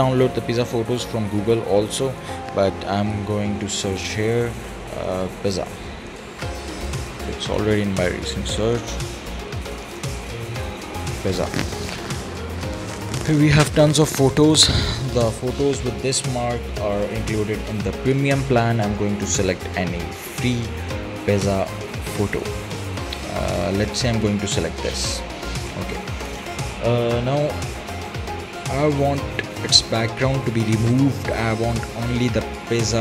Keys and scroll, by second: 5.1 p, 5.3 i, 5.7 z, 6.0 a, 6.8 Return.